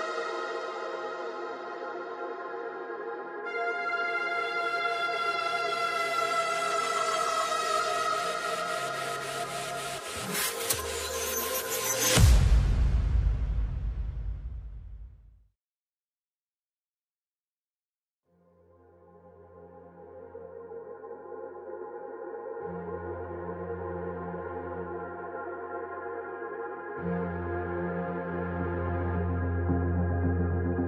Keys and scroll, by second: 29.4 Left, 30.4 Return.